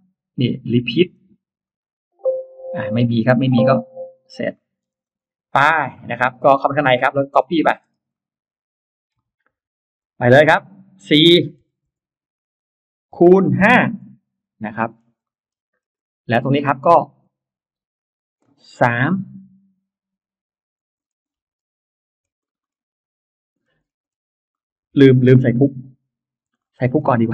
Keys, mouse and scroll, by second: 1.5 click, 2.8 click, 3.8 click, 4.4 middle click, 4.8 scroll down 2, 4.9 space, 5.0-5.4 scroll up 2, 5.4 Escape, 5.4 space, 5.8 click, 5.9 Escape, 6.1-6.4 scroll up 2, 6.4 click, 7.1 click, 7.7 scroll down 1, 8.0 middle click, 8.6 scroll down 1, 9.2 m, 9.8 click, 11.5 4, 11.7 Return, 13.0 x, 13.4 5, 13.8 Return, 14.5 space, 14.8 middle click, 15.2 middle click, 15.2 scroll down 1, 15.6-15.9 scroll up 1, 16.2 click, 16.8-17.4 scroll up 1, 18.8-19.4 scroll up 2, 20.7 m, 20.8-21.5 scroll down 3, 22.0-22.7 scroll up 4, 23.4-24.2 scroll down 3, 24.4 middle click, 24.6-25.2 scroll down 1, 26.2 ctrl+z, 26.4 scroll up 1, 26.4 middle click, 26.6 scroll down 1, 26.7 space, 26.8 scroll up 1, 26.9 scroll down 1, 27.0-27.3 scroll up 3.